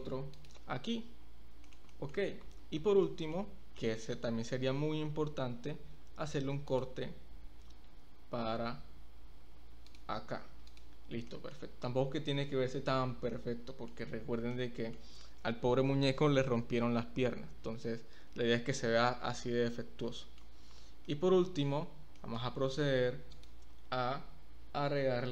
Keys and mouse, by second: 0.9 Tab, 1.6 shift+click, 1.9 click, 2.8 Tab, 3.0 middle click, 3.7 middle click, 6.2 ctrl+r, 9.9 click, 10.4 Tab, 10.7 click, 11.3 middle click, 12.5-12.9 middle drag, 13.3-13.9 middle drag, 14.5-14.9 middle drag, 20.1-20.4 shift+middle drag, 21.1-21.6 middle drag, 22.2 shift+middle click.